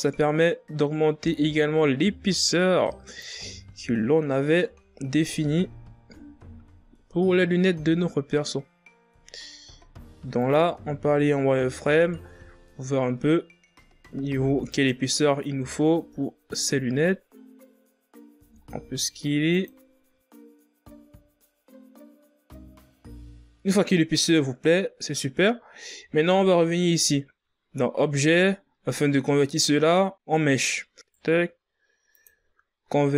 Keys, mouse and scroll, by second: 3.8-4.8 scroll up 3, 4.8 Tab, 5.5 a, 5.7 a, 6.2 s, 8.9 click, 10.8 z, 12.2-14.2 scroll up 4, 14.2-14.8 scroll up 1, 14.8-17.5 drag, 18.5 s, 20.4 click, 20.9 z, 21.0 scroll down 3, 21.1 Tab, 21.6-22.2 shift+scroll up 2, 22.3 shift+scroll down 5, 22.5-23.1 scroll up 2, 23.5-26.2 scroll up 1, 31.1 right click, 32.2-33.1 drag.